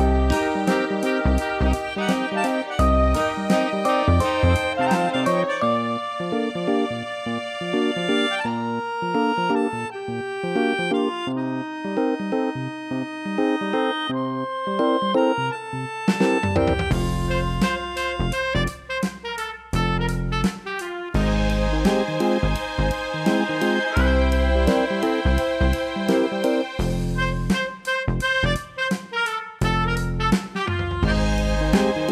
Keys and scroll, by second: 21.9 ctrl+i.